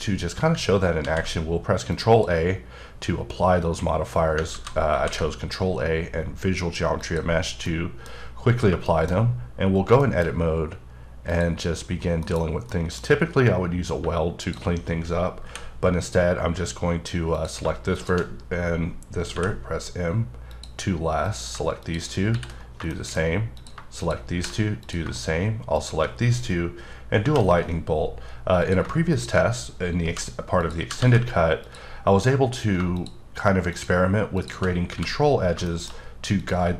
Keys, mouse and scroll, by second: 1.0 ctrl+a, 1.9 click, 4.9 a, 7.0 click, 7.6 middle click, 8.8 shift+middle click, 9.1-10.0 scroll up 5, 10.0 middle click, 10.2-11.3 scroll up 2, 11.3 click, 12.2 KP_Decimal, 12.7 middle click, 13.0-13.9 scroll up 2, 14.4 shift+click, 15.4 m, 17.3 click, 19.3 m, 20.5 click, 21.2 click, 21.9 shift+click, 22.3 shift+r, 22.6 scroll down 2, 22.9 shift+middle click, 23.6 click, 24.3 shift+r, 24.8 click, 25.7 shift+click, 27.2 j, 28.6 click, 31.0 g, 31.6 click, 33.7 shift+double click, 34.4 shift+click, 34.9 f, 35.4 scroll down 2, 35.6 shift+middle click, 36.4 click, 36.6 shift+click.